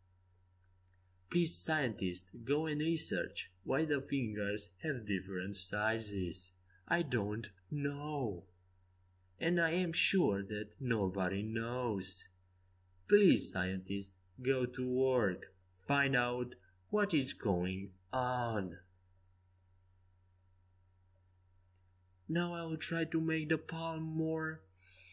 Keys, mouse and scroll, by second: 1.9-2.9 middle drag, 1.9 e, 6.0-7.2 drag, 7.2 ctrl+z, 12.0-17.2 right drag, 13.6-17.2 drag, 17.4 ctrl+z, 17.8-19.9 middle drag, 19.9 right click, 21.8-23.2 middle drag, 23.2 click, 23.5-25.1 middle drag.